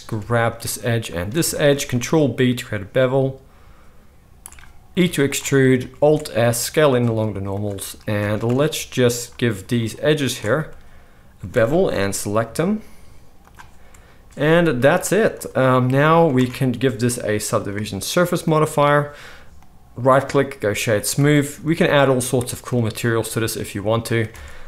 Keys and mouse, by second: 0.4-6.1 alt+shift+middle drag, 2.0 ctrl+b, 4.9 e, 6.0 alt+s, 8.2 alt+a, 9.7 alt+shift+click, 10.2 alt+shift+click, 11.8 ctrl+b, 12.0-17.5 middle drag, 14.7 ctrl+r, 16.3 Tab, 17.5-24.4 drag, 19.5-24.4 middle drag, 19.5-24.4 right drag, 24.3 alt+a.